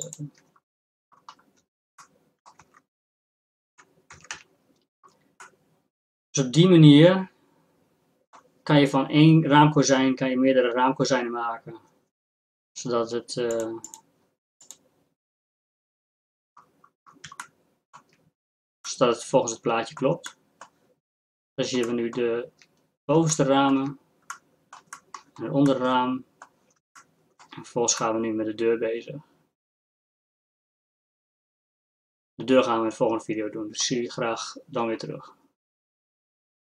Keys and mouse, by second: 1.1 middle click, 1.9 Tab, 2.6 Tab, 3.7 Tab, 4.2 Tab, 4.3 a, 13.5-15.7 drag, 17.1-23.4 drag, 29.9-33.0 middle drag.